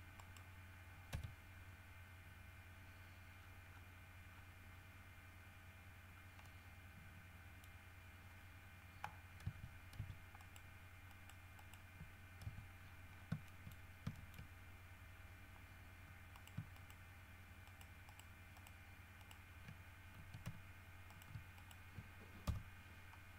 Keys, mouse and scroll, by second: 0.3 middle click, 1.3 KP_3, 3.5 scroll up 2, 4.5-5.1 scroll up 4, 6.3 scroll down 2, 6.6-8.0 middle drag, 9.6 Tab, 10.5 right click, 11.3 right click, 11.7 right click, 12.6 Tab, 13.0-13.5 scroll up 2, 13.7 shift+middle click, 14.3 shift+middle click, 16.5 shift+middle click, 16.9 shift+right click, 17.8 shift+right click, 18.7 shift+right click, 19.4 shift+right click, 20.3 x, 20.6 v, 21.3 right click, 21.5 shift+middle click, 21.7 shift+middle click, 22.6 KP_7.